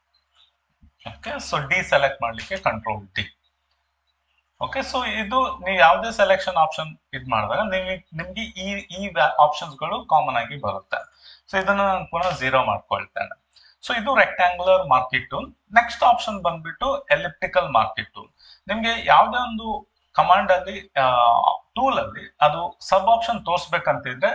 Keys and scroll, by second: 2.3 ctrl+d, 12.6 0.